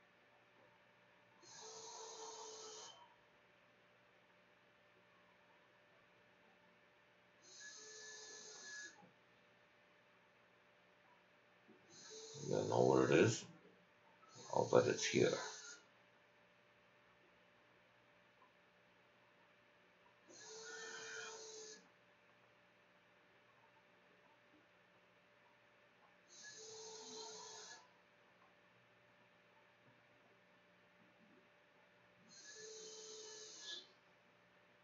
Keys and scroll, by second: 23.6-25.3 typing, 26.5 l, 28.5-34.8 typing.